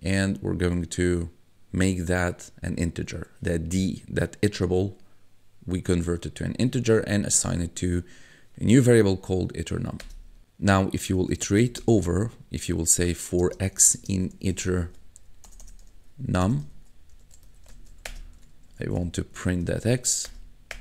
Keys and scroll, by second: 10.0 Return, 11.1-20.4 typing, 18.4 Tab.